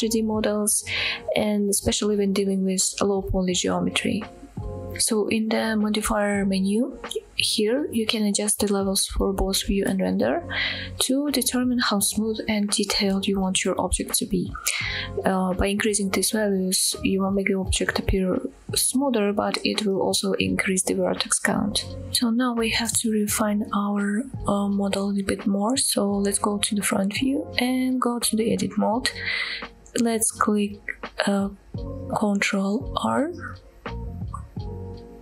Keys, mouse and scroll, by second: 22.7 shift+middle click, 23.8 KP_1, 24.4-24.9 scroll up 4, 25.1 shift+middle click, 25.7 shift+middle drag, 26.1 shift+middle click, 27.0 Tab, 28.9 scroll up 1, 29.4 shift+middle click, 34.4 ctrl+r.